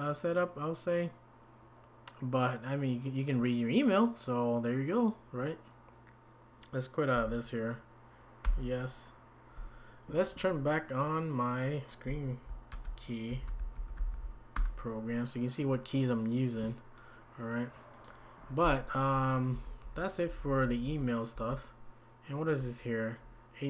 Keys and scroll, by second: 19.5 Down, 19.8-21.3 typing.